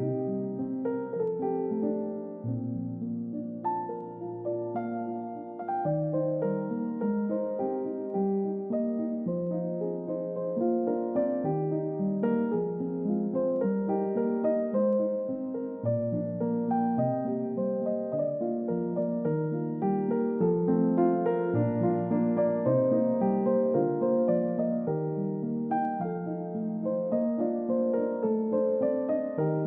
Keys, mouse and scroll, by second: 8.1 shift+click, 15.3 shift+click, 29.3 shift+click.